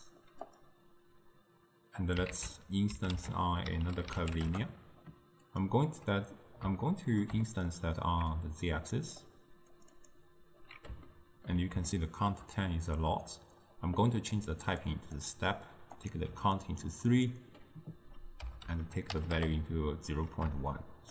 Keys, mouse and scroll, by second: 1.5-2.4 drag, 2.4 ctrl+a, 6.9-8.4 ctrl+middle drag, 8.4-11.1 drag, 11.1-14.4 ctrl+middle drag, 14.4 click, 14.9-16.6 drag, 17.2-20.2 drag, 20.8-21.1 shift+middle drag.